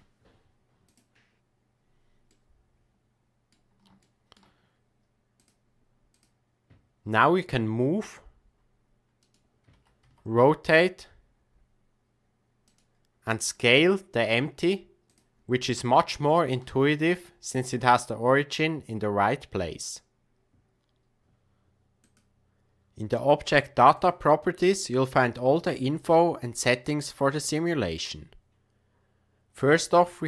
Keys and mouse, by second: 2.3-3.5 middle drag, 4.0-4.4 shift+middle drag, 7.3 g, 9.7 r, 13.4 s, 15.8-16.9 shift+middle drag.